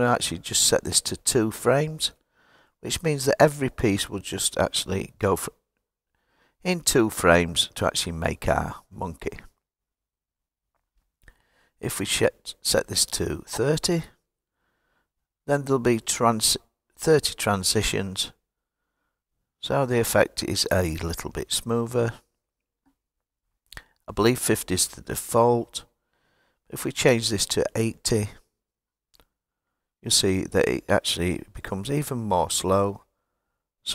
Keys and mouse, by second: 11.2-16.2 drag, 24.8-28.4 drag.